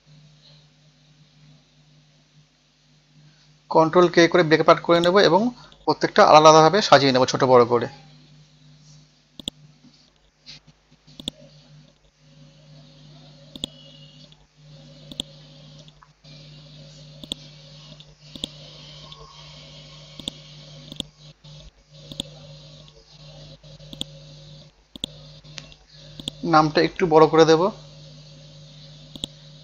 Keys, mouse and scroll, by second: 0.8 ctrl+k, 1.5 scroll down 1, 2.2 scroll up 1, 3.3 scroll down 1, 3.9-5.0 scroll up 1, 5.0 click, 6.7 Down, 7.1 Down, 7.4 typing, 7.7 Return, 9.4 click, 12.6 scroll up 1, 13.5 click, 14.6 scroll down 1, 15.1 click, 16.1-17.3 scroll up 1, 17.3 click, 18.4-19.4 drag, 19.7 Return, 20.2 click, 22.9 scroll up 1, 23.9 click, 27.1 KP_2, 27.3 KP_0, 29.1 click, 29.5 ctrl+a.